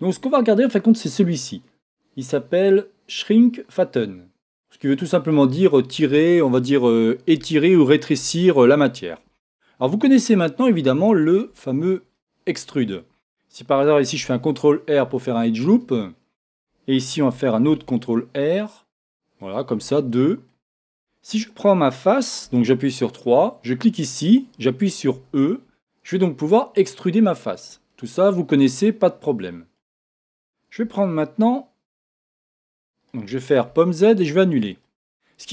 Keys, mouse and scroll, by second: 5.3 click, 10.3-15.7 middle drag, 11.6-12.1 scroll up 1, 14.2 ctrl+r, 15.7 click, 16.0-19.5 middle drag, 17.7 ctrl+r, 19.5 click, 20.0-23.1 middle drag, 22.5 3, 23.1 click, 23.6-27.6 middle drag, 25.1 e, 27.6 click, 27.9-31.9 middle drag, 32.0-33.7 middle drag, 33.7 z, 34.3 middle click, 34.8-35.5 middle drag.